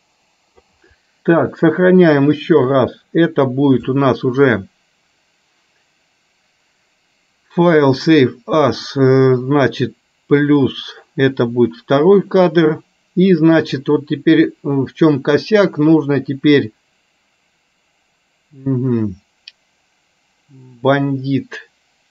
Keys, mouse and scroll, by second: 2.5-8.4 drag, 13.9-22.1 drag.